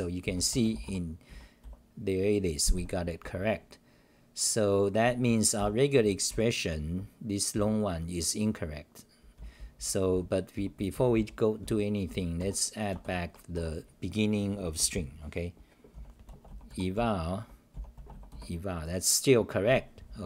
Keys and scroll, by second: 1.3 w, 1.6 c, 2.7 w, 3.2 c, 4.2-5.3 scroll up 4, 5.3-7.5 typing, 9.1-12.9 typing, 13.5 Home, 15.9 t, 16.9-17.4 t, 17.7 t, 20.0 scroll, 20.0-20.2 typing.